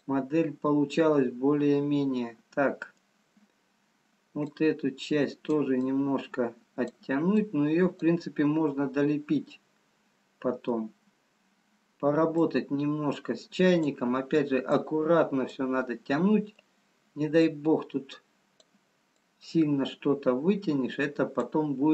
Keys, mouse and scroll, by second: 1.3 middle click, 3.4-4.0 scroll up 2, 4.4 click, 4.4-4.9 scroll up 1, 5.7 click, 7.7 click, 9.3-10.0 scroll down 4, 10.2 middle click, 12.7 click, 15.3 click, 16.1 middle click, 16.6 scroll down 1, 17.5 click, 19.8 click.